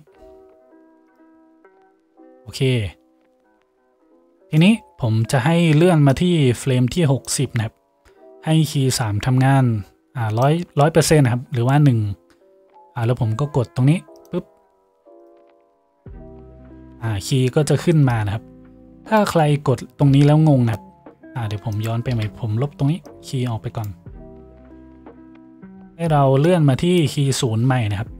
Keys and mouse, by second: 6.2-14.4 drag, 14.4 middle click, 15.2 click, 15.4-18.2 middle drag, 18.2-28.1 drag, 22.2 Delete.